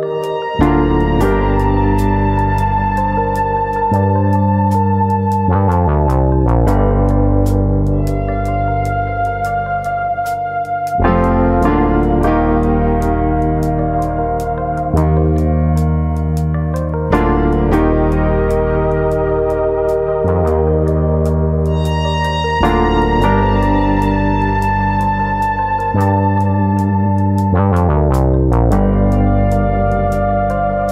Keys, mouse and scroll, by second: 1.5 ctrl+r, 2.5 right click, 2.7 middle click, 2.9-3.9 scroll up 2, 3.3 alt+s, 6.2 click, 6.4 middle click, 6.9 shift+middle click, 7.2 middle click, 8.6 l, 10.7 click, 10.7 middle click, 10.9 middle click, 13.1 s, 13.7 right click, 13.9 middle click, 14.3 shift+middle click, 14.6 middle click, 15.4 click, 16.4 3, 17.1 click, 17.6 middle click, 18.6 ctrl+click, 18.9 middle click, 19.4 shift+click, 20.5 ctrl+click, 21.4 ctrl+click, 21.6 middle click, 22.3 click, 23.5 middle click, 24.2 middle click, 24.6 click, 25.9 middle click, 26.9 click, 27.6 middle click, 28.2 middle click, 28.8 click, 29.1 middle click, 29.8 ctrl+click, 30.2 ctrl+click.